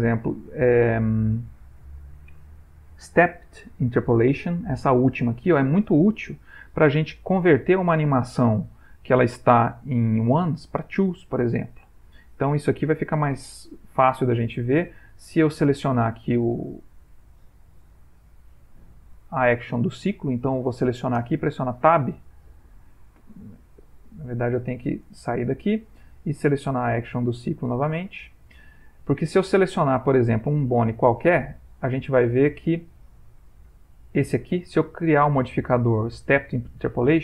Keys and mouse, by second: 14.4 ctrl+middle click, 16.2 click, 20.6 click, 21.4 Tab, 22.6 Tab, 25.3 ctrl+Tab, 26.6 click, 30.5 click, 31.5 ctrl+Tab, 32.6 middle click, 33.3 ctrl+middle click, 34.2 click, 35.3 click.